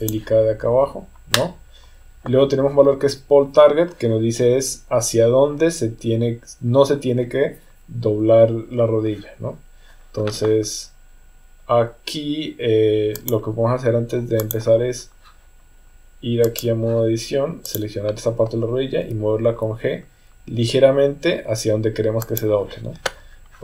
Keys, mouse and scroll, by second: 13.3-14.5 drag, 16.6 click, 17.7 click, 19.0 g.